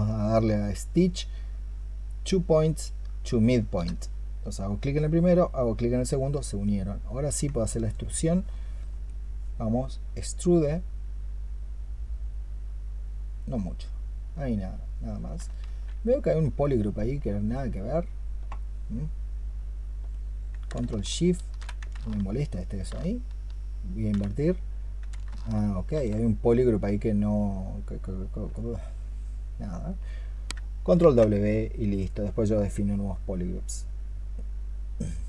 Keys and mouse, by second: 7.4 alt+click, 8.3 alt+click, 15.5 ctrl+z, 22.4 ctrl+shift+click, 25.4 ctrl+shift+click, 30.8 ctrl+w.